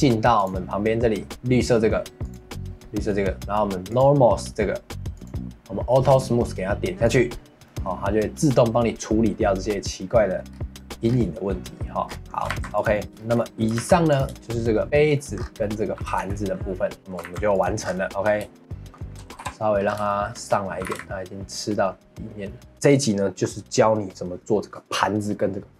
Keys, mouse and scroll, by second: 0.4-7.6 drag, 7.6-10.5 middle drag, 10.5 scroll up 1, 10.8 middle click, 11.0-11.7 scroll up 1, 11.7 middle click, 12.0 scroll down 4, 12.3 middle click, 12.5 ctrl+s, 12.9 middle click, 13.2 shift+middle click, 13.8 ctrl+s, 14.3 shift+middle click, 14.8 click, 15.1 middle click, 15.3 scroll up 4, 15.6 middle click, 15.9 g, 17.0 middle click, 17.2 ctrl+s, 17.8-18.5 scroll down 6, 18.0 middle click, 18.5 shift+middle click, 18.6-19.4 scroll up 5, 19.4 KP_1, 19.8 scroll up 3, 20.1 shift+middle click, 20.8 g.